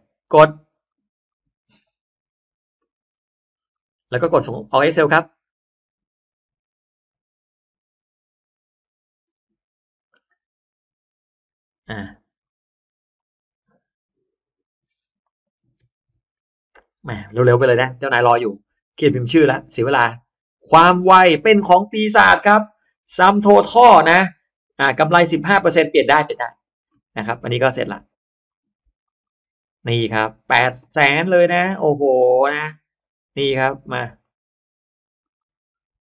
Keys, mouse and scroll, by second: 1.2 click, 3.6 click, 4.8 click, 9.7 click, 11.4 click, 12.3 click, 14.3 click, 15.7 t, 15.9 t, 16.2 Return, 20.6 click, 22.3 click, 23.8 click, 24.0 click, 26.0 click, 26.2 click, 28.4 click, 28.9 click, 29.1 click, 32.8 click, 34.1 click, 35.1 click.